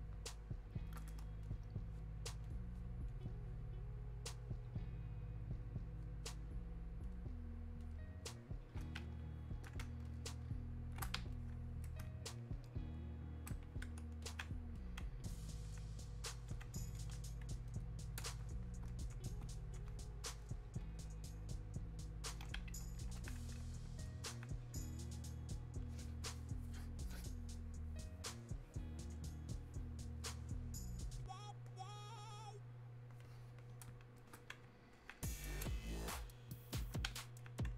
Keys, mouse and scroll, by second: 10.1 shift+click, 11.4-12.9 shift+drag, 14.2-17.0 alt+drag, 20.4-28.4 drag, 29.1-37.4 drag, 37.4-37.7 alt+drag.